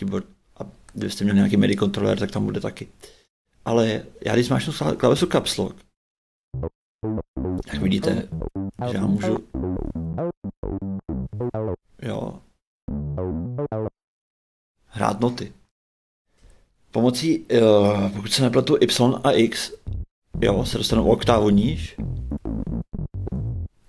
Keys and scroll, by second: 6.5 shift+a, 7.6-13.8 typing, 19.4 shift+y, 19.8 shift+a, 20.9-23.8 typing.